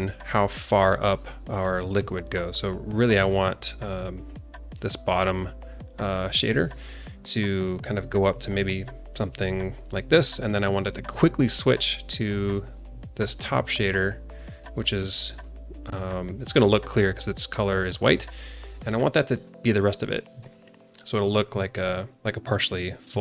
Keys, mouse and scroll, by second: 1.9 click, 3.3 alt+middle click, 4.2 click, 5.3-5.8 drag, 6.4 click, 6.9 click, 7.6 click, 8.4-9.4 drag, 12.5 click, 13.5-14.7 drag, 19.4 click, 20.3 alt+middle click, 21.7 click, 23.1 ctrl+d.